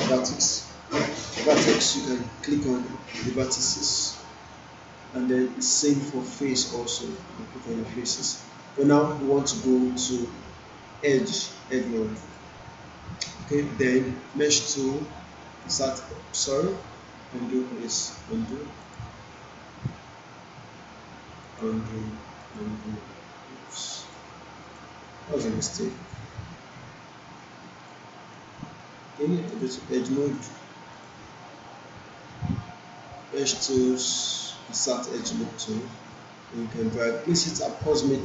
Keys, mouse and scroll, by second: 2.5 click, 5.3-6.9 right drag, 7.1 click, 9.5-11.6 right drag, 12.2 click, 18.8 click, 21.6 click, 27.4-28.0 alt+click, 28.3-29.6 right click, 30.4-38.2 drag.